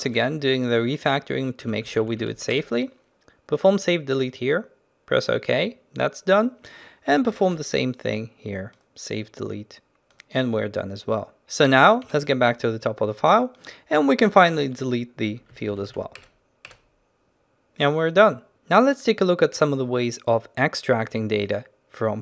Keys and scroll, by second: 7.4 ctrl+alt+shift+t, 8.3 ctrl+alt+shift+t, 14.6 ctrl+alt+shift+t.